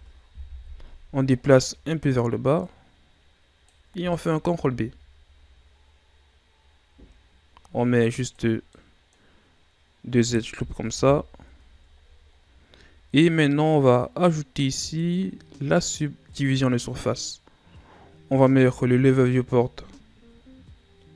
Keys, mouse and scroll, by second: 0.5 KP_1, 1.4-2.6 scroll down 4, 2.6-4.4 drag, 4.4 ctrl+b, 8.5 scroll down 1, 8.7 middle click, 9.3-10.8 scroll up 1, 10.8 KP_1, 11.4 Tab, 12.0-12.8 scroll down 8, 13.7-14.8 drag, 16.5-17.8 drag, 18.5 x.